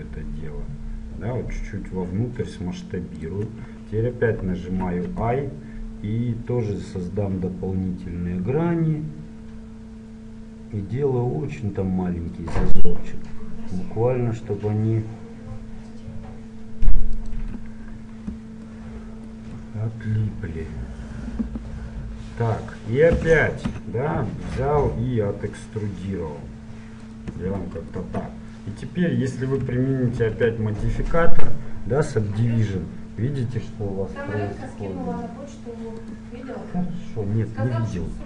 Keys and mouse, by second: 4.5 i, 18.8-23.2 middle drag, 23.2 e, 27.7 click, 28.1 Tab, 30.3 ctrl+1, 33.9 middle click, 36.0-38.1 drag.